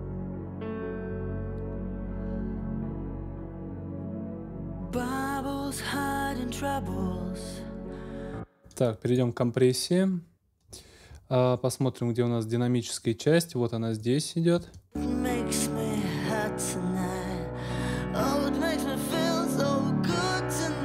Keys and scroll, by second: 8.1 space, 14.6 space.